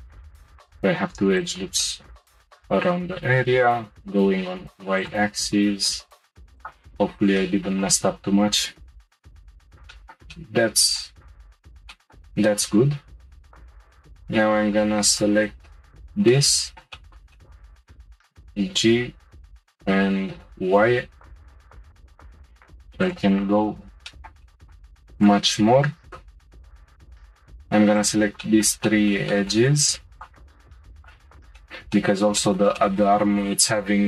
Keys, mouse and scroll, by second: 0.1 middle click, 0.4 shift+click, 1.4 shift+click, 1.8-3.5 middle drag, 3.5 g, 6.6 click, 7.4 shift+middle click, 7.9-8.7 scroll up 2, 8.7 g, 9.7 scroll down 2, 9.9-11.3 shift+middle drag, 11.3-11.9 scroll down 1, 11.9-13.9 shift+middle drag, 13.9 click, 15.1 shift+click, 15.9 shift+click, 16.3-17.4 middle drag, 17.9 g, 23.7-24.1 scroll down 1, 24.1-25.1 shift+middle drag, 25.1 click, 26.1 2, 26.7 click, 27.9 ctrl+click, 28.4-30.1 shift+middle drag, 30.1 shift+click, 30.9 ctrl+click, 31.6-34.0 middle drag.